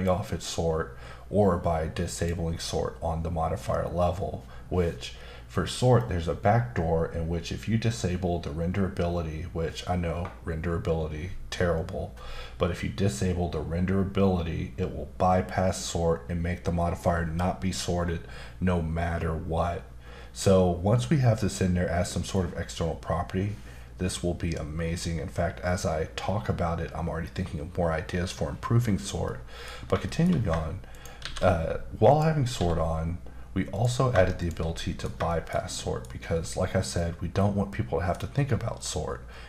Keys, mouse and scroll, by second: 2.1 click, 29.2 middle click, 30.1 shift+middle click, 30.3 scroll up 1, 30.9 shift+right click, 31.2 shift+a, 32.1 click, 32.5 s, 33.7 click, 34.4 shift+click, 34.7 middle click, 35.3 shift+middle click, 36.9 middle click, 38.8 middle click.